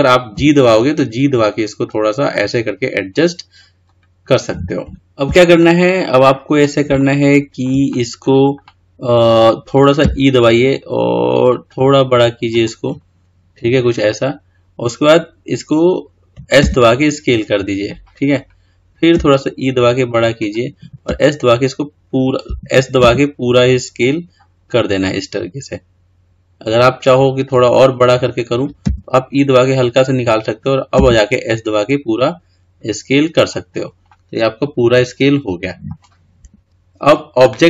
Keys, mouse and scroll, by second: 5.0 KP_9, 5.8-10.3 middle drag, 10.3 e, 13.0-14.6 scroll up 6, 14.6-16.8 scroll down 1, 16.8 s, 34.3-36.4 middle drag, 36.5-37.6 scroll down 3.